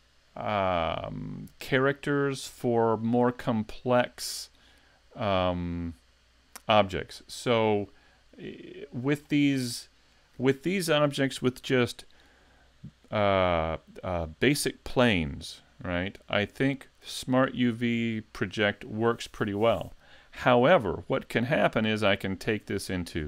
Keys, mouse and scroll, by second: 12.9 click, 14.1 scroll down 3, 15.2 scroll down 2, 15.4 shift+middle click, 16.3-16.7 scroll up 2, 16.7 shift+middle click, 17.2 scroll down 2, 17.6 shift+middle click, 18.1 scroll up 2, 21.5 shift+middle click, 22.4-23.2 scroll down 1.